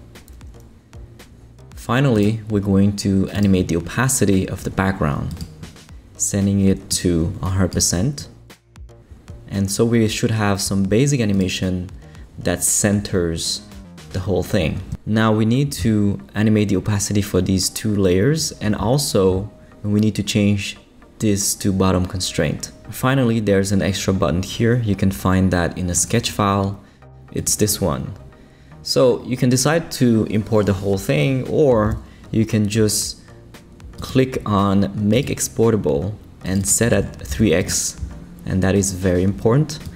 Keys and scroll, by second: 36.9 3, 37.3 x, 37.6 Return.